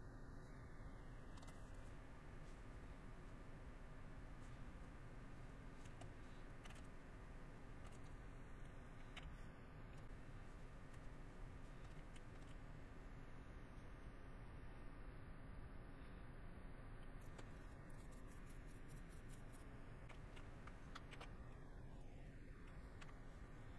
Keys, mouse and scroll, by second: 2.5 middle click, 4.5 middle click, 5.2 middle click, 10.0 middle click, 11.7 middle click, 12.2 middle click, 13.8 middle click, 15.1 middle click, 15.9 middle click, 17.2 scroll, 17.3 middle click, 18.2 middle click.